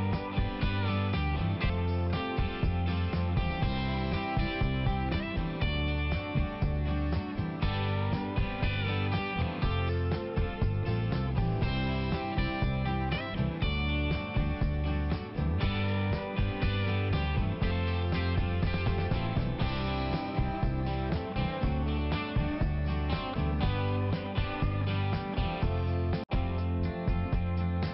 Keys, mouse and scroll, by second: 0.1 double click, 0.8 click, 0.9 click, 1.1 click, 1.2 click, 1.4 click, 1.5 double click, 1.6 double click, 1.8 double click, 1.9 double click, 2.1 double click, 2.2 double click, 2.4 double click, 2.5 double click, 2.6 double click, 2.8 double click, 2.9 double click, 3.1 double click, 3.2 double click, 3.5 double click, 3.6 double click, 3.8 double click, 3.9 double click, 4.2 double click, 4.3 double click, 4.5 double click, 4.6 double click, 4.8 double click, 5.0 double click, 5.2 double click, 5.4 double click, 5.6 double click, 5.8 double click, 6.1 double click, 6.6 click, 6.8 click, 6.9 click, 7.1 double click, 7.3 double click, 7.5 double click, 7.6 double click, 7.8 double click, 8.0 double click, 8.1 double click, 8.4 double click, 10.1 click, 10.2 click, 10.4 click, 10.5 double click, 10.8 double click, 11.0 double click, 11.1 double click, 11.3 double click, 11.5 double click, 11.8 double click, 12.3 click, 12.4 click, 12.7 click, 12.8 double click, 13.0 double click, 13.1 double click, 13.5 double click, 13.5 double click, 13.8 double click, 13.9 double click, 14.1 double click, 14.2 double click, 14.4 double click, 14.6 double click, 14.7 double click, 14.9 double click, 15.1 double click, 15.2 double click, 15.4 double click, 15.5 double click, 15.6 double click, 16.1 click, 16.2 click, 16.3 click, 16.4 double click, 16.8 double click, 16.9 double click, 17.1 double click, 17.2 double click, 17.5 double click, 17.6 double click, 17.8 double click, 17.9 double click, 18.5 double click, 19.5 click, 19.9 click, 20.0 click, 20.3 click, 20.4 double click, 20.8 double click, 21.0 double click, 21.2 double click, 21.3 double click, 21.6 double click, 21.7 double click, 21.8 double click, 21.9 double click, 22.1 double click, 22.2 double click, 22.5 double click, 22.6 double click, 22.8 double click, 22.9 double click, 23.1 double click, 23.2 double click, 23.5 double click, 23.6 double click, 23.7 double click, 23.8 double click, 24.0 double click, 24.1 double click, 24.4 double click, 24.5 double click, 24.7 double click, 24.9 double click, 25.2 double click, 25.4 double click, 25.6 double click, 25.8 double click, 25.9 double click, 26.1 double click, 26.2 double click, 26.5 double click, 26.8 double click, 27.1 click, 27.3 click, 27.8 double click.